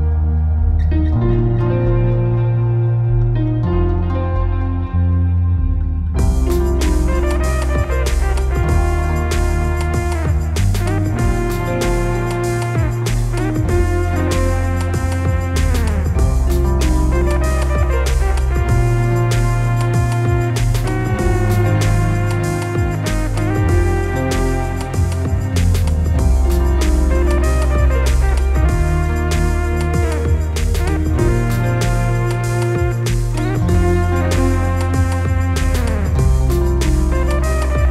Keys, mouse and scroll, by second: 13.0 click, 14.2 click, 17.9-26.1 drag, 27.4 click, 28.4 click, 30.7 click, 30.9 click, 32.5-37.9 drag.